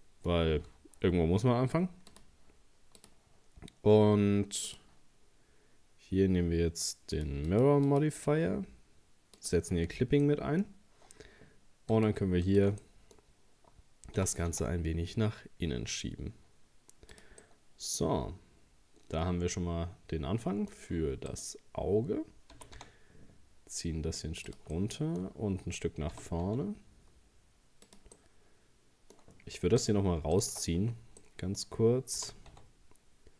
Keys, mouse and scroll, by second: 0.0-2.1 middle drag, 2.1-6.0 drag, 7.2-9.9 drag, 9.9-10.2 scroll up 2, 10.2 middle click, 10.7 scroll up 1, 11.9 right click, 12.5 alt+shift+right click, 12.8 middle click, 13.2-13.5 scroll down 1, 14.2 g, 17.4-20.4 middle drag, 21.3 right click, 22.6 g, 24.7-26.1 middle drag, 26.1 g, 28.2-29.8 middle drag, 29.8 right click, 30.4 alt+shift+right click, 30.8-31.1 scroll down 1, 31.2 middle click, 32.2 g.